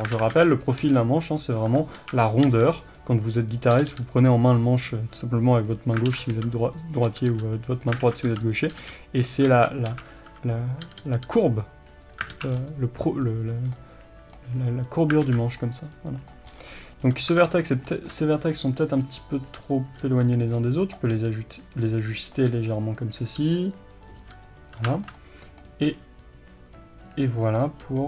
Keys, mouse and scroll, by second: 0.2 alt+a, 2.0 alt+a, 3.5 b, 6.1 alt+a, 6.9 b, 8.0 alt+a, 8.5 b, 9.3 click, 9.8 alt+a, 10.6 b, 12.3 alt+a, 12.5-13.7 scroll down 1, 13.7-17.1 middle drag, 15.2 alt+z, 16.5-17.1 scroll up 1, 17.1 click, 17.9-20.0 shift+middle drag, 19.0 g, 20.0 r, 20.6 click, 21.2 g, 21.6 click, 22.5 g, 23.0 click, 23.4 g, 24.8 click, 24.9-27.2 shift+middle drag, 25.9 g, 27.2 click, 27.8 g.